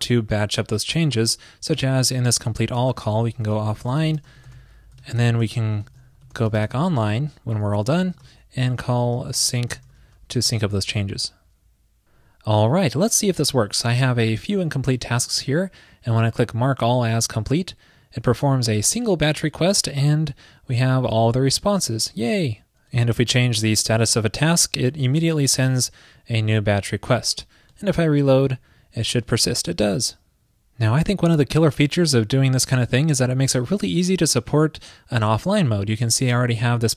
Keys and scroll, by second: 5.0 super+Right, 8.3 super+Return, 10.7 super+s.